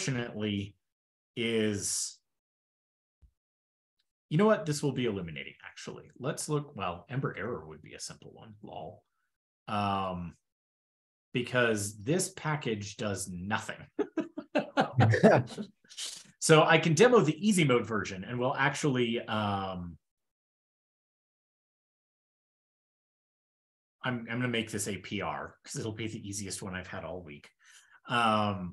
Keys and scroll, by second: 6.7 super+p, 17.2 super+w, 20.7 ctrl+shift+k, 21.2 super+s, 22.5 ctrl+super+Return, 23.4 ctrl+l.